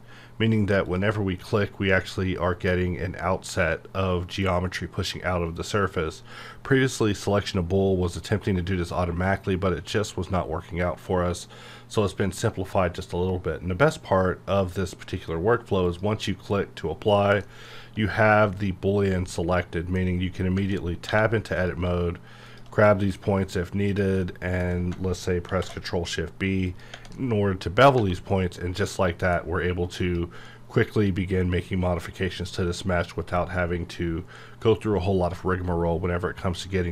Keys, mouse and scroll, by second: 0.8 a, 0.9 click, 2.2-15.8 middle drag, 15.8 click, 17.4-20.6 middle drag, 21.6 click, 22.8 middle click, 23.9 shift+click, 24.2 shift+middle click, 25.4 ctrl+shift+b, 26.7 click, 26.9 Tab, 27.1 middle click, 28.0 1, 28.3-30.0 middle drag, 30.0 click, 30.5-36.9 middle drag.